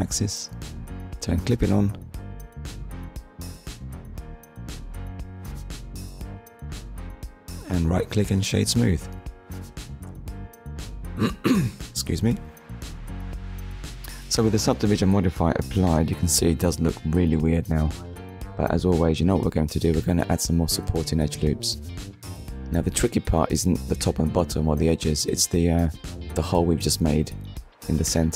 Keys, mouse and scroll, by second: 0.3 click, 2.1 ctrl+s, 3.0 middle click, 4.4 click, 5.3 right click, 7.3 click, 8.0 middle click, 8.8 Tab, 10.5 click, 11.8 click, 13.3 click, 16.0 click, 17.9 click, 19.7 middle click, 20.3 Tab, 20.6 middle click, 22.1-22.5 scroll up 1, 22.7 shift+middle click, 23.7-24.0 scroll up 1, 24.0 Tab, 26.5 click.